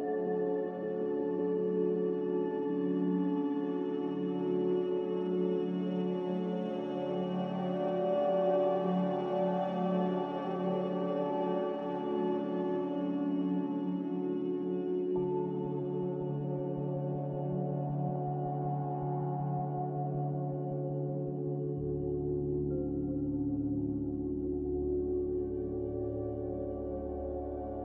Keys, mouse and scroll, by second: 0.3 b, 2.6 ctrl+b, 3.1 click, 10.0 click, 16.4 click, 20.8 click, 21.4 b, 26.5 ctrl+b, 26.9 click.